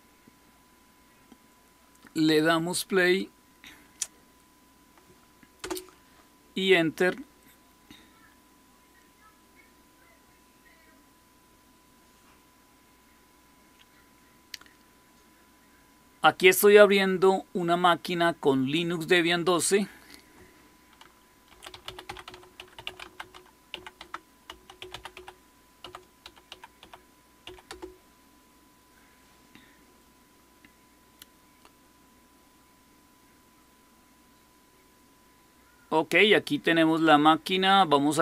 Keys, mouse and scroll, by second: 5.5 Return, 21.2-27.3 typing, 23.9 Tab, 27.6 Return.